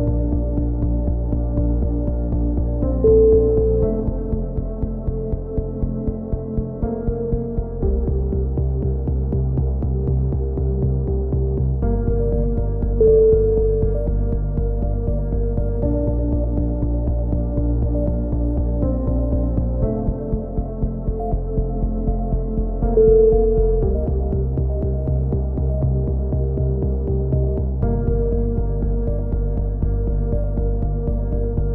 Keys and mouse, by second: 1.6 right click, 2.4-3.9 middle drag, 3.9 click, 5.6 right click, 6.0 middle click, 6.5-7.7 drag, 7.9 click, 9.2-11.4 drag, 9.7 right click, 10.4 right click, 12.0 a, 12.2-13.3 drag, 14.0-16.2 middle drag, 16.5 ctrl+r, 19.5 a, 20.3-23.0 middle drag, 23.0 k, 24.2 click, 24.5 right click, 25.1 middle click, 25.8 click, 27.0-28.0 middle drag, 28.3-29.5 right drag, 28.7 click, 29.5 click, 29.9 click, 31.2 right click, 31.5 click.